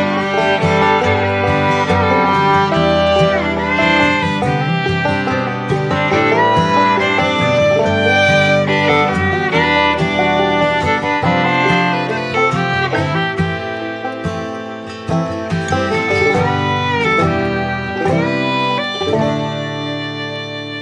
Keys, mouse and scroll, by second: 3.9 typing, 7.2 double click, 12.5 typing, 13.5 typing, 16.2-16.6 typing, 20.3-20.8 typing.